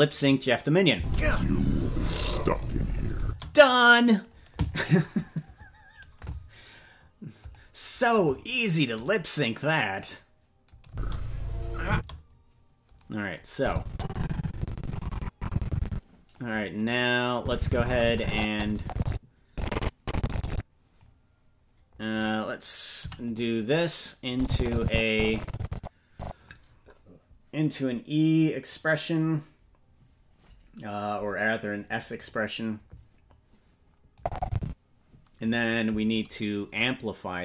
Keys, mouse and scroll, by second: 0.9 space, 7.4 click, 7.4 space, 10.8 space, 11.9 space, 13.5-16.4 drag, 17.3-21.0 drag, 22.9 i, 24.3-26.5 drag, 32.1 click, 34.1-35.5 drag.